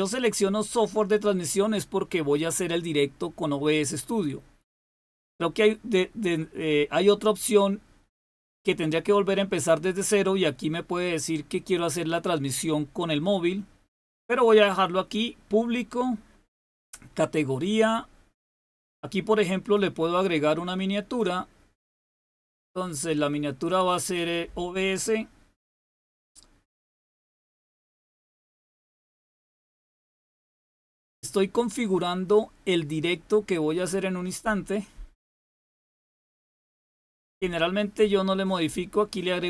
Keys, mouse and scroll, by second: 14.0-15.6 scroll down 2, 15.6-16.5 scroll down 1, 19.5 click, 21.0 click, 23.9 click, 25.6 click, 26.1-27.9 drag, 29.3-30.3 scroll down 1, 30.3-31.5 scroll down 1, 33.2-33.5 scroll down 1, 34.2-34.9 scroll down 1, 34.9-35.6 scroll down 1, 38.1-39.4 scroll up 1.